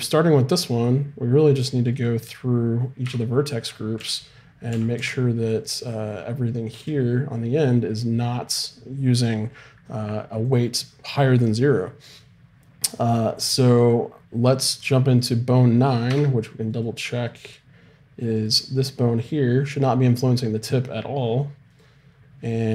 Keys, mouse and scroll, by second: 2.0-3.1 right drag, 3.1 Tab, 4.0 a, 4.7 z, 5.0 b, 10.5-12.2 drag, 15.2 click, 16.1 Tab, 16.7-18.4 right drag, 21.7 right click, 21.9-22.7 drag.